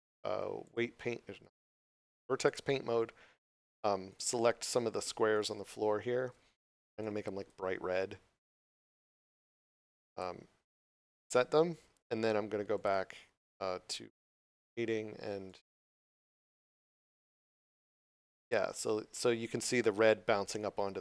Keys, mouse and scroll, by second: 4.0 right click, 4.5 shift+right click, 4.8 shift+right click, 5.2 shift+right click, 6.9 click, 12.7 click, 18.5 scroll down 1.